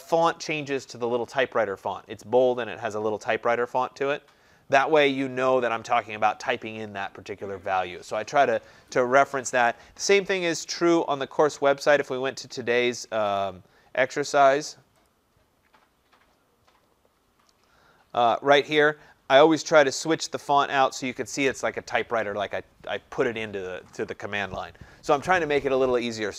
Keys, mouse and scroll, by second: 10.7 click, 13.4 click, 16.6 scroll, 17.4 scroll, 20.2 scroll.